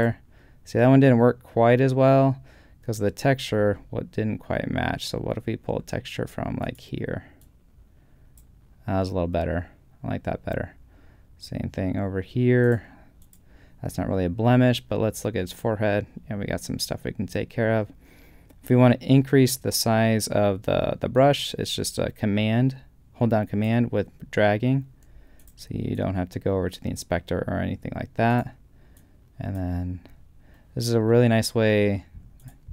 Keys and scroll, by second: 3.7 super+z.